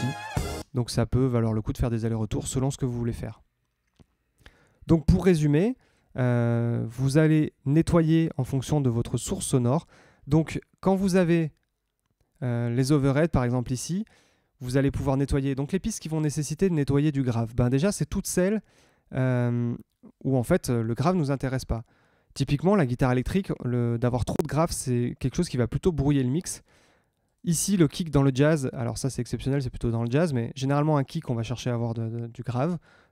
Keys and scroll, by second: 0.5 space.